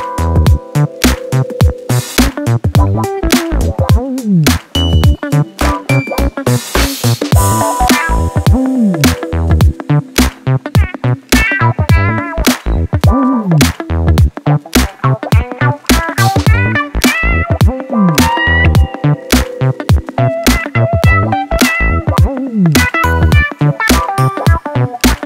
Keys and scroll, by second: 0.3 ctrl+d, 0.6 Escape, 10.8-12.7 typing, 13.3 ctrl+z, 14.3 F1, 19.7 ctrl+z.